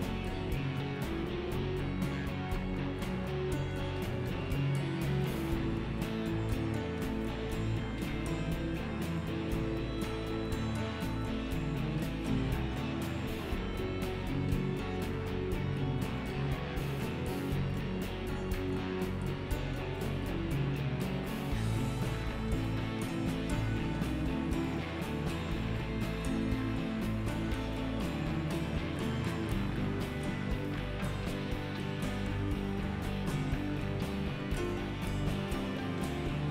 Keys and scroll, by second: 11.2 1.